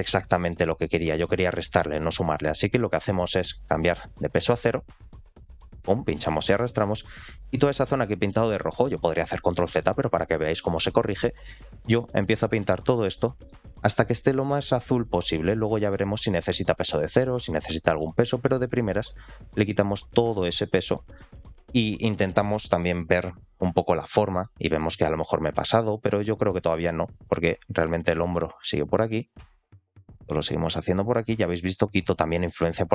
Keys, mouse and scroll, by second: 4.1-5.7 drag, 6.3 middle click, 7.1-7.6 scroll up 3, 7.6 middle click, 7.9 shift+middle click, 11.3-12.4 drag, 12.7 middle click, 13.4 middle click, 13.8 shift+middle click, 14.7 click, 15.9 middle click, 16.3 shift+middle click, 16.7 click, 17.7 middle click, 18.3 click, 19.0 middle click, 19.6 click, 20.3-20.7 scroll down 2, 20.7 middle click, 21.3 shift+middle click, 21.8-22.6 scroll down 2, 23.5 scroll up 1, 24.1 middle click, 24.5-24.9 scroll up 2, 24.9 middle click, 25.5 click, 26.4 middle click, 27.1 click, 28.0 middle click, 28.9 click, 29.6 middle click, 30.2-32.9 drag.